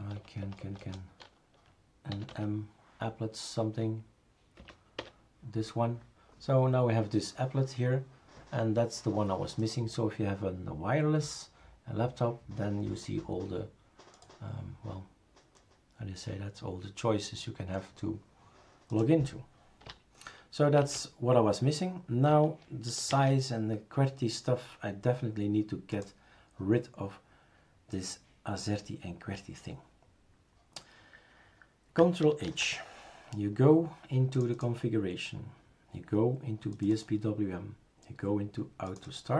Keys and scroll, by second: 0.4 BackSpace, 0.4 BackSpace, 0.6 BackSpace, 0.8 BackSpace, 1.9-2.8 typing, 4.6 Right, 5.0 Return, 20.8 shift+super+q, 23.1 shift+super+a, 32.5 ctrl+h.